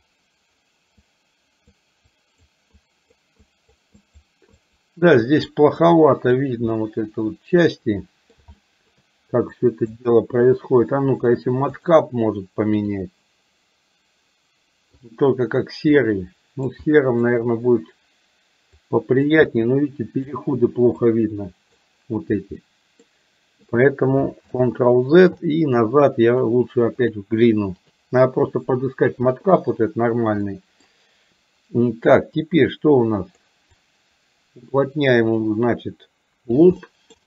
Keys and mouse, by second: 0.0 click, 1.1 click, 2.2 click, 2.7 click, 3.5 click, 4.0 click, 4.7 click, 5.2 click, 6.0 click, 6.8-8.5 middle drag, 8.6 shift+middle click, 9.6 click, 11.8-15.5 drag, 16.0 middle click, 16.8 shift+middle click, 18.8 click, 19.5 middle click, 21.1 click, 22.7 middle click, 24.7 ctrl+z, 26.3-28.3 drag, 30.6 middle click, 32.5-33.5 drag, 33.8-36.6 drag, 36.8 middle click.